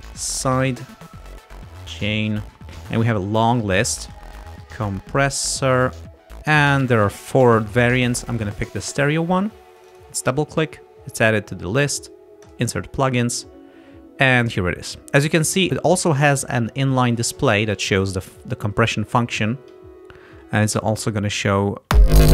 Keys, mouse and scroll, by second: 0.0-2.8 typing, 4.1-5.6 typing, 9.9 click, 12.6 click, 21.9 space.